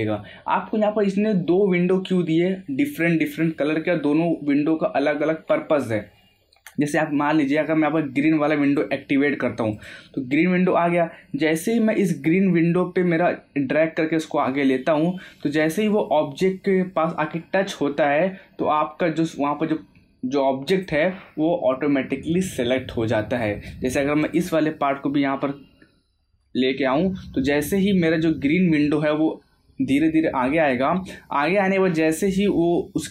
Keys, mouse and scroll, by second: 8.6 click, 20.7 click, 24.2 click.